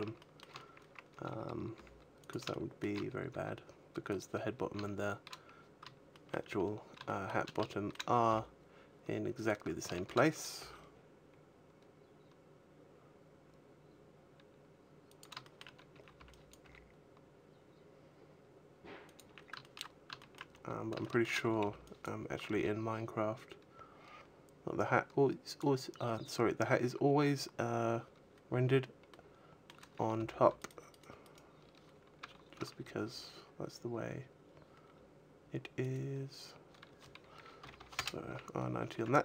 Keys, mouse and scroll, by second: 0.0 shift+middle click, 0.9 a, 1.5 g, 2.1 click, 2.3 shift+middle click, 3.1 g, 4.0 click, 5.9 shift+middle click, 6.3-6.8 scroll up 3, 6.8 shift+middle click, 7.5 shift+middle click, 8.1 g, 9.1 click, 9.6 shift+middle click, 10.0-10.8 scroll up 3, 10.4 g, 15.0 click, 15.2 shift+middle click, 15.6 scroll down 1, 15.7 a, 15.9 b, 16.4 g, 18.8 click, 19.0 a, 19.4 shift+middle click, 19.7 scroll up 1, 20.0 shift+middle click, 20.3-20.8 scroll up 1, 20.8 shift+middle click, 21.4 b, 22.3 g, 25.4 click, 28.9 middle click, 29.6 a, 29.9 b, 30.4 right click, 30.6 right click, 30.8 right click, 31.9 a, 32.4 a, 32.9 r, 35.7 right click, 37.4 r, 38.1 a, 38.4-38.9 scroll down 5, 38.7 Tab, 39.0 middle click.